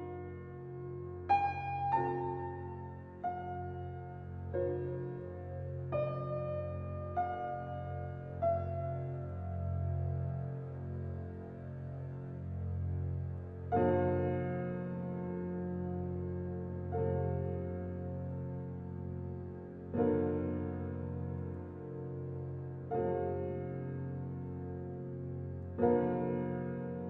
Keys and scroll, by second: 4.2 typing, 10.3 [.